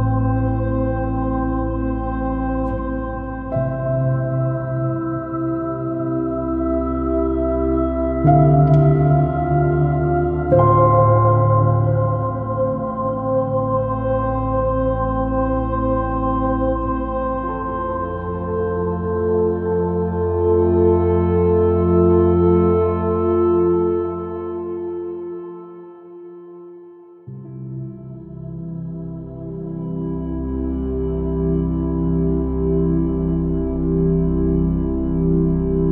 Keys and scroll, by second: 0.1 super+space, 3.5 space, 6.7 super+space, 8.4 super+space, 9.5 super+space, 10.5 super+space, 11.5 super+z, 12.3 super+space, 13.5 super+space, 16.3 super+space, 22.1 super+-, 22.3 super+space, 31.3 super+z, 31.6 super+z, 32.8 super+i.